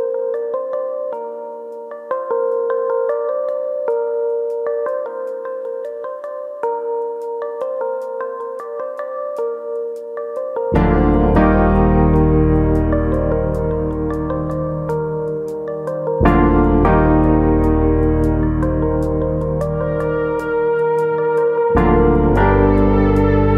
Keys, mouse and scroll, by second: 4.9 scroll down 1, 5.2 middle click, 6.4-7.3 scroll up 3, 6.7 shift+middle click, 7.3 middle click, 7.9-8.6 scroll down 2, 8.4 scroll up 1, 9.9 middle click, 11.1 scroll up 1, 11.4 middle click, 13.1-13.5 scroll down 1, 13.8 scroll down 1, 15.0 middle click, 15.0-15.8 scroll up 1, 15.8 click, 16.1 scroll up 2, 16.3 shift+middle click, 16.5 middle click, 17.0 KP_1, 17.6-18.2 scroll down 1, 18.5 scroll down 1, 18.6 click.